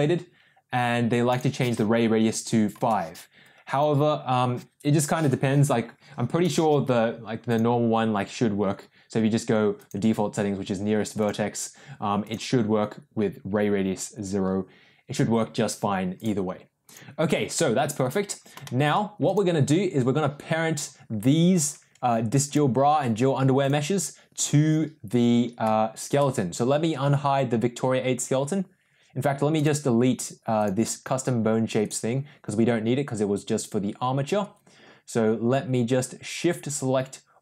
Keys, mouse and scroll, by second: 1.2-6.9 drag, 7.4-10.4 drag, 11.1 click, 16.1 click, 17.5 middle click, 18.0 click, 18.6 shift+middle click, 19.2 click, 23.5 click, 29.5 click, 30.7 drag, 31.7 click.